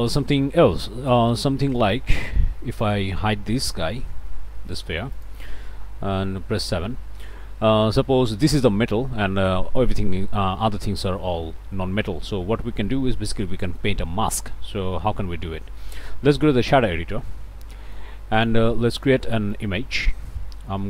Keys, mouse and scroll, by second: 1.4 click, 2.8 click, 4.2 h, 4.7 click, 5.1 click, 6.2 7, 6.8-7.5 scroll up 2, 10.1 scroll up 1, 13.5 click, 16.1 click, 16.7 ctrl+space, 17.7 click, 18.3 click, 18.9 shift+click, 19.2 shift+a, 19.5 shift+click, 20.5 i, 20.8 m.